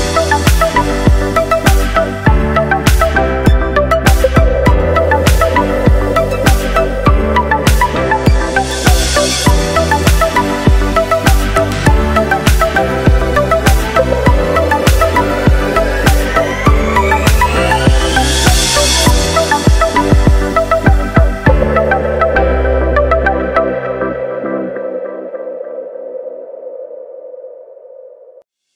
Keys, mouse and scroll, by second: 0.6 click, 1.3 click, 2.0 g, 3.6-4.1 middle drag, 4.1-4.5 scroll up 4, 4.5-6.9 shift+middle drag, 6.9 click, 8.0 click, 9.0-10.6 drag, 11.5-12.8 scroll down 4, 14.9-15.8 drag, 17.1-19.1 drag, 19.3 scroll up 2, 19.6-20.8 middle drag, 20.8-21.4 scroll down 1, 21.4 click, 22.1 click, 23.1 KP_0, 24.1-25.3 scroll down 2, 25.3-25.8 scroll down 2, 27.4-28.1 scroll down 2, 28.1-28.7 scroll down 3.